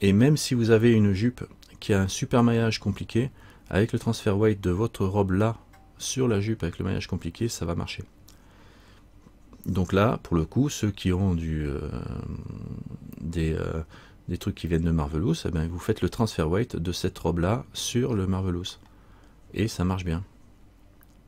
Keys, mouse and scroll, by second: 19.0 scroll down 1.